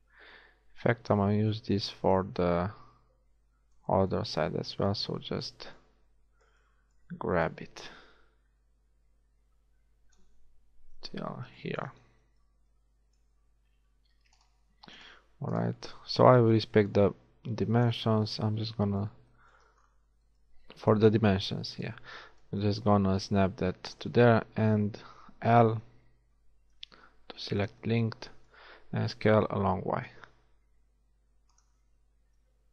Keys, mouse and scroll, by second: 1.4 alt+z, 1.4 middle click, 2.2 z, 5.0-6.9 drag, 7.6-9.1 drag, 9.1 middle click, 11.0 f, 12.2 a, 17.0 click, 21.9-23.6 drag, 25.8 l, 26.8 KP_1, 29.5 s.